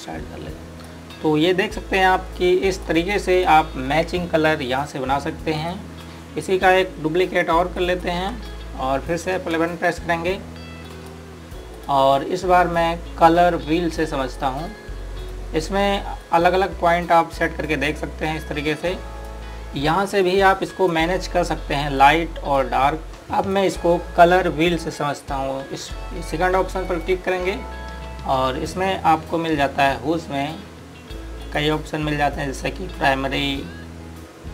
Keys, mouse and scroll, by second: 8.5 ctrl+right click, 10.2 F11, 11.7 click, 15.2 click, 32.2 click.